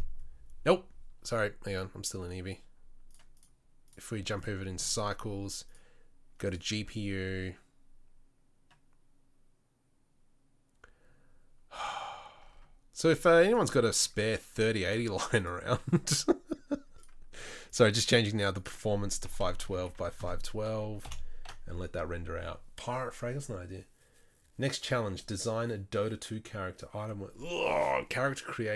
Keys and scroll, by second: 1.8 F12.